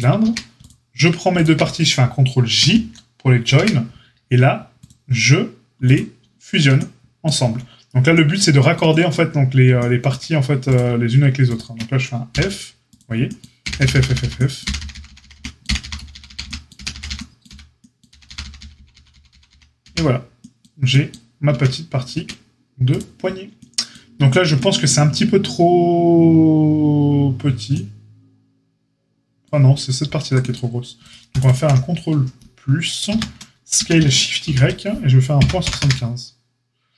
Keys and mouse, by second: 0.2 Tab, 1.3 shift+click, 1.4-4.7 shift+middle drag, 2.6 ctrl+j, 3.5 Tab, 4.7-5.9 drag, 5.9-10.6 shift+middle drag, 10.6 click, 10.7-11.4 shift+middle drag, 11.4 shift+click, 11.5-22.9 shift+middle drag, 12.3 f, 13.6-19.8 typing, 21.5 Tab, 22.1 Tab, 22.9-31.0 drag, 31.0 alt+middle click, 31.2 alt+shift+click, 31.3 alt+shift+middle click, 31.4 alt+shift+click, 31.5-36.9 alt+shift+middle drag, 33.0 ctrl+KP_Add, 33.7 s.